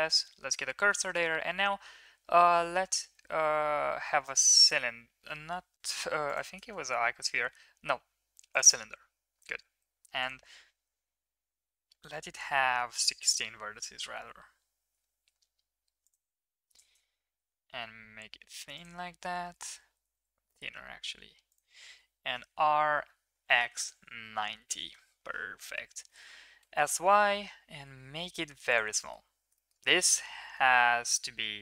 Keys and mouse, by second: 0.4 middle click, 1.0 shift+a, 5.8 x, 6.6 shift+a, 10.2-13.2 drag, 14.2 s, 16.5 s, 19.6 middle click, 19.8 s, 22.4 r, 25.7 middle click, 26.1 s, 29.1 click, 29.1 middle click, 29.1 right click, 29.6 shift+click, 29.6 shift+middle click, 29.6 shift+right click, 30.2 d, 30.5 y.